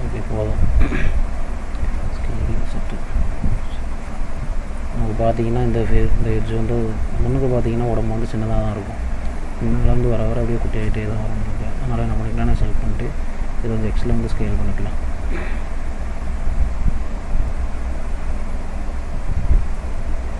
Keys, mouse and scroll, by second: 0.1 middle click, 0.8-2.0 scroll up 2, 2.0 s, 3.6 middle click, 4.9-5.5 scroll up 2, 6.6 click, 7.1 middle click, 8.2 click, 8.5 scroll up 2, 11.4 click, 12.4 alt+click, 13.4 s, 16.5 middle click, 17.6-19.4 scroll down 3, 18.4 middle click.